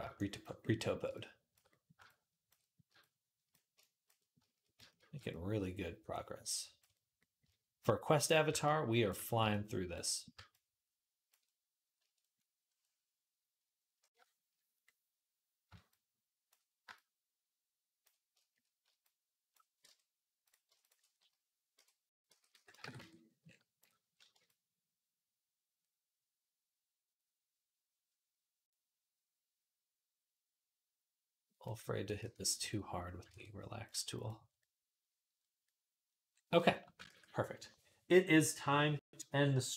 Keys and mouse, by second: 0.0-20.3 shift+drag, 19.7 Tab, 20.3-24.3 alt+shift+middle drag, 21.6 ., 22.1 s, 22.8 Tab, 24.3-39.7 shift+drag, 32.1 ctrl+z, 33.1 ctrl+Tab, 33.8-39.7 middle drag, 33.8-39.7 right drag, 37.4 ctrl+s.